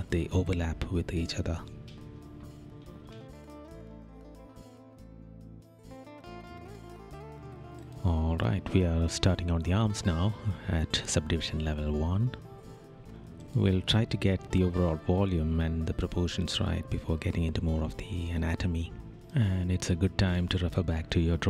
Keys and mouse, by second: 8.9 right click, 10.6 right click, 12.0 right click, 12.6 right click, 14.3 right click, 14.9 right click, 15.3 right click, 15.8 right click.